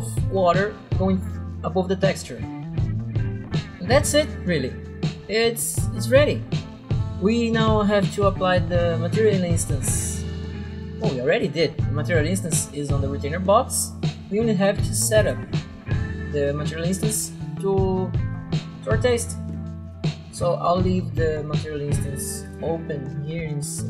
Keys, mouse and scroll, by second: 5.2 right click, 9.3 right click, 10.3 click, 10.9 click, 15.3 click, 19.9 click, 22.5 click.